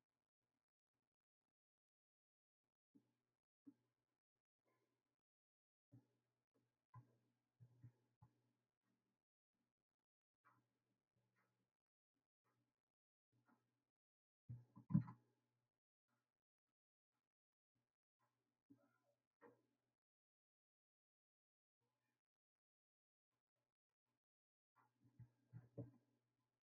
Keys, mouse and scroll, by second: 9.7-17.7 right drag, 17.7-20.0 drag, 26.5-26.6 drag.